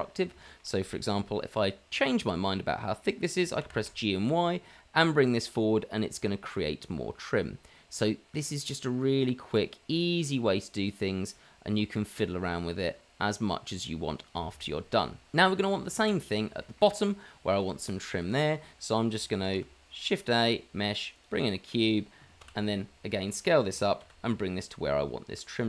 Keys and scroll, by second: 3.6 g, 19.6 shift+a, 22.3 s, 23.0 g, 24.3 shift+z, 25.1 g.